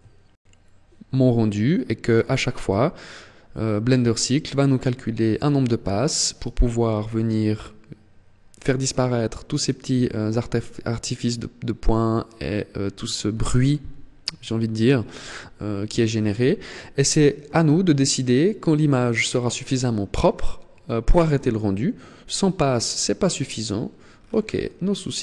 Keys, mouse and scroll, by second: 23.0 click, 23.5-24.1 scroll down 6, 24.1-24.5 scroll down 1, 24.7 click.